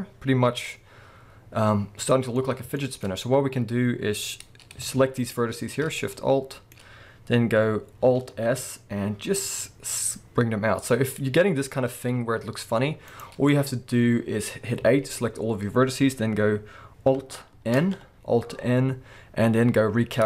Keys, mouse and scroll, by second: 2.4-2.8 scroll up 2, 3.2-5.2 scroll up 1, 5.2 alt+shift+click, 6.1-13.2 middle drag, 8.2 alt+s, 13.2 right click, 13.3 scroll down 1, 13.5-20.2 middle drag, 14.6 scroll up 2, 14.8 a, 17.7 alt+n.